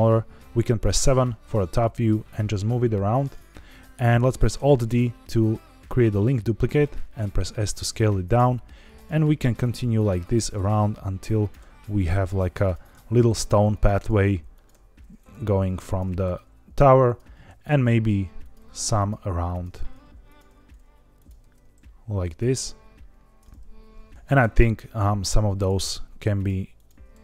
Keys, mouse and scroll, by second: 0.9 KP_7, 1.8 g, 3.1-3.6 drag, 4.5 alt+d, 6.5 click, 6.8 s, 7.6 click, 8.3 alt+d, 8.9 click, 9.1 s, 9.6 click, 9.7 g, 10.2 click, 10.5 alt+d, 11.3 click, 11.5 s, 11.9 click, 12.0 g, 12.5 click, 12.8 alt+d, 13.6 click, 14.0 alt+d, 14.5 click, 14.6 s, 15.1 click, 15.3 g, 15.8 click, 16.2 alt+d, 17.0 click, 17.4 alt+d, 18.3 click, 18.5 s, 18.9 click, 19.1 g, 19.5 click, 19.7 alt+d, 20.2 click, 20.4 s, 21.1 click, 21.3 alt+d, 22.2 click, 22.4 s, 23.1 click, 23.3-24.1 middle drag, 24.1 alt+d, 24.4 shift+z, 25.5 click, 26.7 shift+click, 27.1 alt+d.